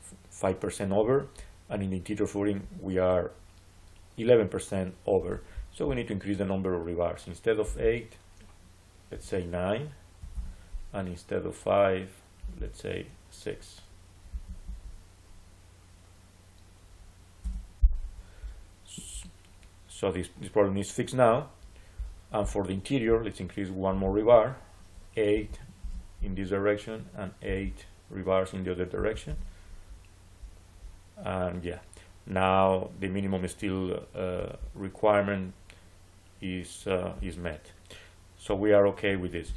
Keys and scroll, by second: 10.0 9, 10.2 Return, 14.1 6, 14.5 Return, 17.3 Return, 25.2 8, 25.7 Return, 28.8 8, 29.1 Return.